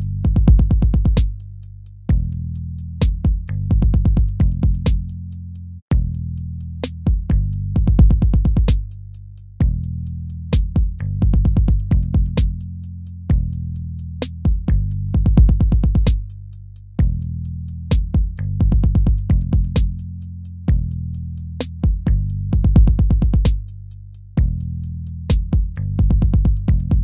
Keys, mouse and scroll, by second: 1.0 ctrl+v, 1.8 ctrl+v, 2.4 ctrl+v, 3.0 ctrl+v, 4.0 ctrl+v, 4.7 ctrl+v, 5.7 ctrl+v, 6.5 ctrl+v, 7.7 ctrl+v, 8.6 ctrl+v, 9.7 ctrl+v, 10.5 ctrl+v, 11.2 ctrl+v, 11.8 ctrl+v, 12.5 ctrl+v, 13.3 ctrl+-, 13.6 ctrl+-, 13.8 ctrl+-, 15.6 ctrl+v, 16.0 ctrl++, 17.4 ctrl+v, 17.7 ctrl+v, 18.2 ctrl+v, 18.9 ctrl+v, 19.4 ctrl+v, 19.8 ctrl+v, 20.8 ctrl+v, 21.5 ctrl+v, 23.1 ctrl+v, 24.1 ctrl+v, 25.0 ctrl+v, 25.7 ctrl+v, 26.2 ctrl+v.